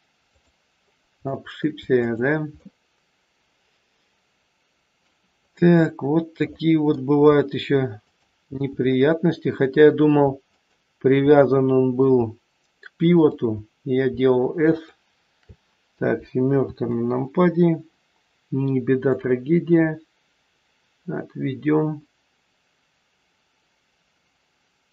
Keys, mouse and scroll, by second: 0.7 scroll up 2, 1.2 shift+middle click, 1.8 click, 2.6 middle click, 5.2 scroll up 1, 6.3 middle click, 8.1 shift+click, 8.8 middle click, 10.5 shift+click, 11.5 middle click, 13.1 shift+click, 16.6 KP_7, 17.3-17.7 scroll down 3, 19.1 click, 19.1-19.6 scroll down 1.